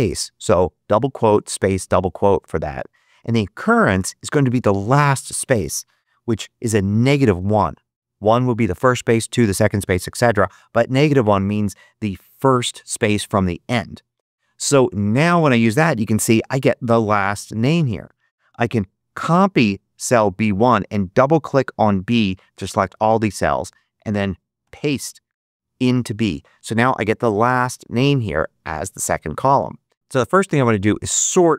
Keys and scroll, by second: 6.9 -, 7.3 1, 19.1 super+c, 24.5 super+v.